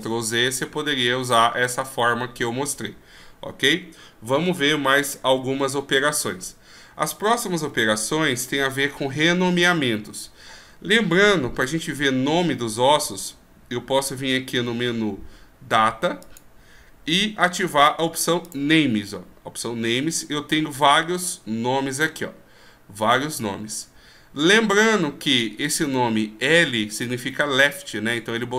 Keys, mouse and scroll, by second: 7.9 w, 16.5 click, 18.7 click.